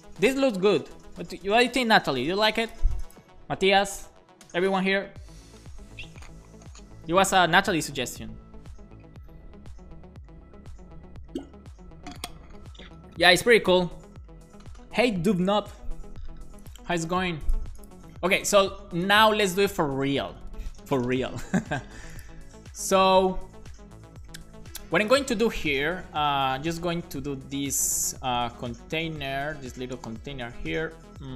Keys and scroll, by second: 26.2 shift+,, 26.6 shift+., 27.2 Left, 27.5 Right, 28.2 Return, 28.6 shift+,, 29.0 /, 29.7 shift+., 30.1 Up.